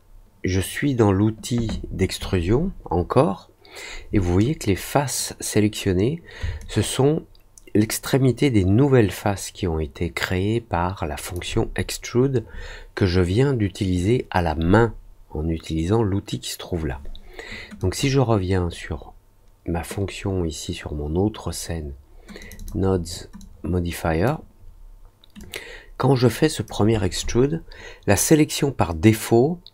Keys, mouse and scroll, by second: 6.5-11.3 alt+drag, 17.7 click, 22.3 click, 22.5 click, 23.3 click, 25.3-26.6 drag.